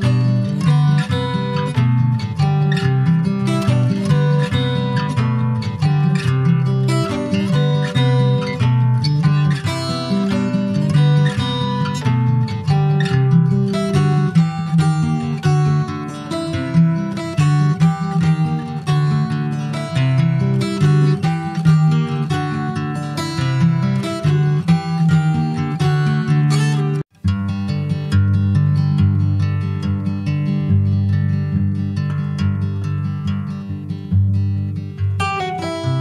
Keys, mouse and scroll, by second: 0.0 middle click, 0.3 ctrl+scroll up 1, 0.5 ctrl+s, 0.6 click, 1.1 ctrl+s, 1.5 click, 1.9 shift+a, 5.2 alt+middle click, 5.5 alt+middle click, 6.3 ctrl+s, 6.8 click, 8.1 click, 9.4-9.9 scroll up 4, 9.9 shift+middle click, 10.4 shift+scroll up 1, 11.2 e, 12.2 r, 15.6 ctrl+s, 15.7 click, 16.0 click, 16.6 scroll up 3, 16.8 Tab, 18.4 alt+middle click, 20.5 click, 20.9 click, 21.7 Tab, 21.9 click, 22.9 s, 26.1 click, 27.4 alt+middle click, 28.1 ctrl+s, 28.2 click, 28.4 Tab, 28.7-30.2 middle drag, 30.2 2, 30.5 click, 31.2 1, 31.5 click, 32.1 alt+middle click, 33.3 click, 34.8 alt+middle click, 35.7 Tab.